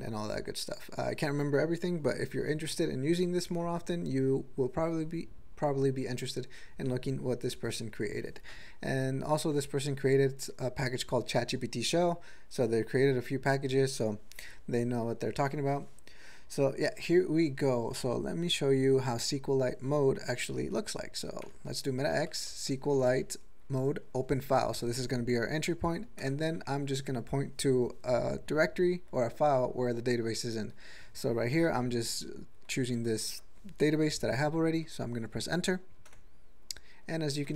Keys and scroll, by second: 21.6 alt+x, 22.5-23.5 typing, 26.4 ., 26.4 Return, 26.8 alt+p, 32.9 ctrl+a, 33.2 ctrl+e.